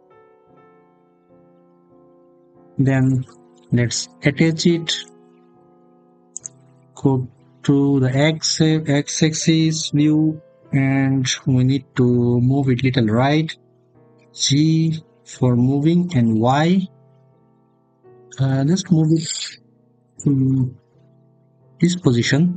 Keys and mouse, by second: 6.1 click, 14.0 g, 15.9 y, 21.6 click.